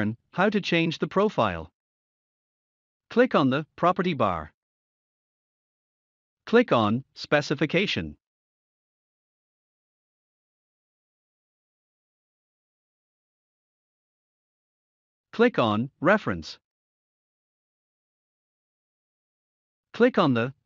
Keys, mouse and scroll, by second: 1.4 click, 3.5-4.2 typing.